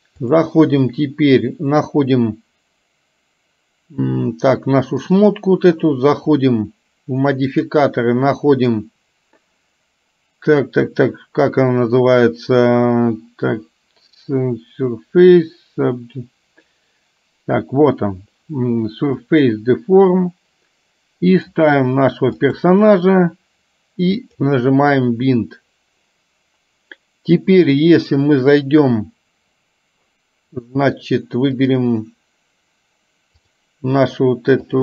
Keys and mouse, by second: 7.5 click, 8.5-19.7 drag, 21.3 click, 24.2 click, 31.7 click, 34.7 click.